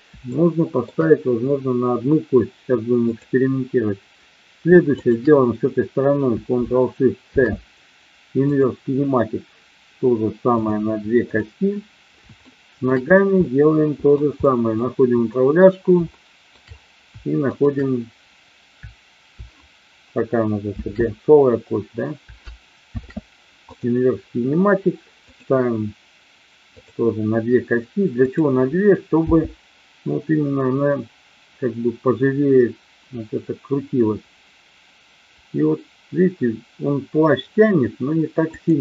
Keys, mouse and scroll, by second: 0.2 shift+middle click, 3.1-3.9 drag, 4.9-5.7 shift+drag, 10.5 click, 12.4-12.7 shift+middle drag, 13.4-14.1 middle drag, 14.5 middle click, 15.1-16.0 drag, 16.1-16.5 shift+middle drag, 17.5-18.4 shift+drag, 20.6 ctrl+shift+x, 22.7 ctrl+shift+c, 25.2 click, 26.6 click, 28.1-29.0 drag, 29.2 g, 38.5 click.